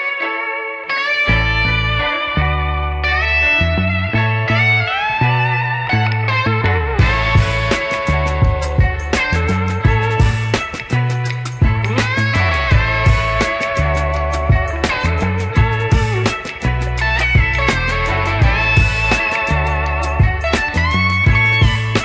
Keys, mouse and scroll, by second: 3.0 Tab, 4.5-5.2 middle drag, 5.9 click, 6.9 ctrl+Tab, 7.5 ctrl+r, 9.4 Tab, 10.3 click, 12.1 drag, 12.9-14.4 drag, 16.4 click, 16.8 click, 17.3 click, 17.5 click, 18.0-20.5 drag, 21.5 click.